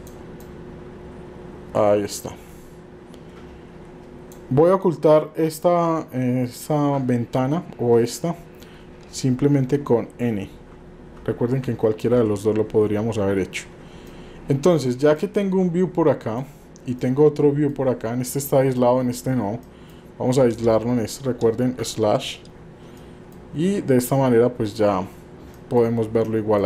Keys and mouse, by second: 0.6-4.3 drag, 9.5-11.6 n, 14.1-14.8 middle drag, 15.3-16.4 middle drag, 17.0-17.7 middle drag, 18.8 middle click, 19.7 middle click, 23.1 middle click, 25.6 middle click, 26.2 middle click.